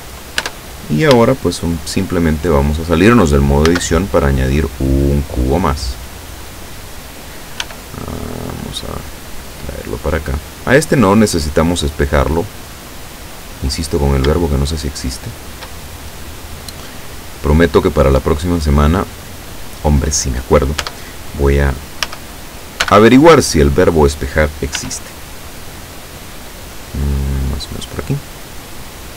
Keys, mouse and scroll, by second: 0.4 Tab, 3.7 shift+a, 6.5 click, 7.7 s, 10.2 click, 10.8-13.6 drag, 13.8-14.3 scroll up 2, 14.3 shift+scroll up 1, 14.5-15.9 shift+middle drag, 17.1-19.3 drag, 20.9 Tab, 22.1 a, 22.9 b, 23.4 click, 24.8 s, 27.5 click, 28.5-29.1 drag.